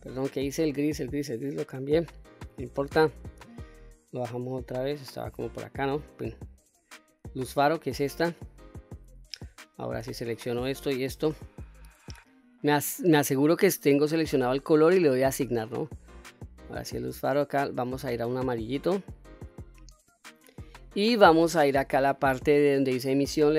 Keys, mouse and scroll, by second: 2.5 click, 7.2 click, 9.7 click, 10.8 shift+click, 12.3 click, 15.2 click, 16.9 click, 20.9-23.1 scroll down 6, 23.4 click.